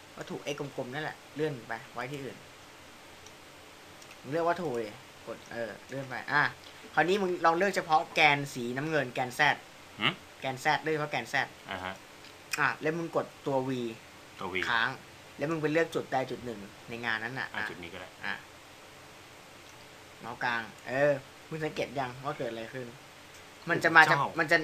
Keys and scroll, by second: 1.7 x, 14.5 v.